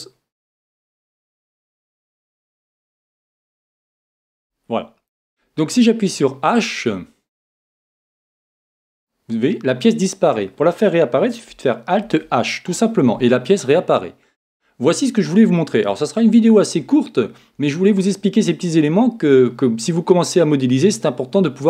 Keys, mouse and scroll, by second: 1.2 middle click, 2.2-4.2 drag, 4.4 n, 8.7 h, 12.0 alt+h.